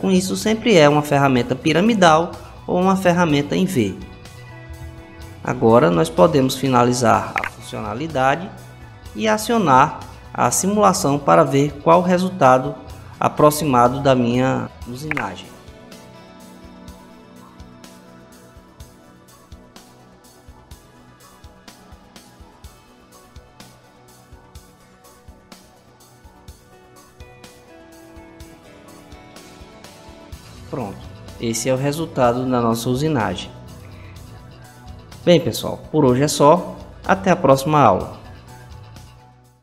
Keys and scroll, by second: 4.5 Home.